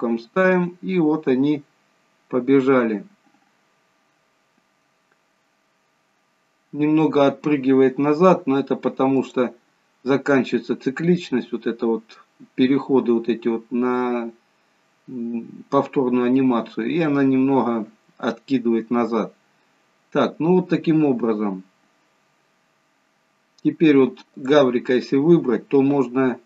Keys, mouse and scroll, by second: 0.6 click, 9.4 click, 10.2 scroll down 2, 20.0-20.5 scroll up 1, 21.6-22.2 scroll down 3, 22.6-23.2 scroll down 3, 24.5 click.